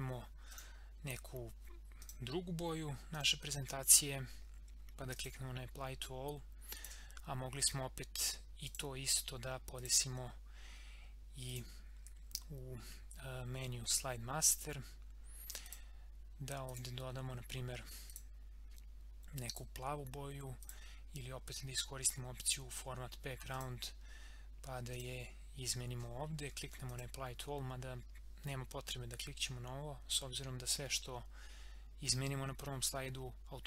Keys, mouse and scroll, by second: 10.7 scroll up 1, 11.5 click, 14.4 click, 23.5 click.